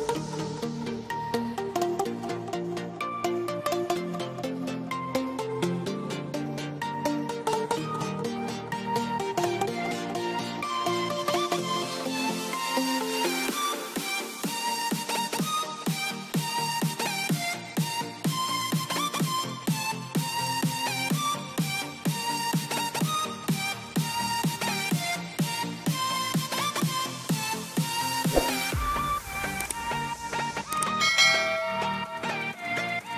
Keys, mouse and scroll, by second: 0.3 click, 2.0 click, 2.8 c, 3.7 click, 7.6 click, 8.0 middle click, 10.0 click, 21.0 click, 22.9 right click, 24.0 click, 24.8 c, 25.1 click, 27.0 click, 27.9 middle click, 29.6 click, 30.1 scroll up 1, 30.9 click.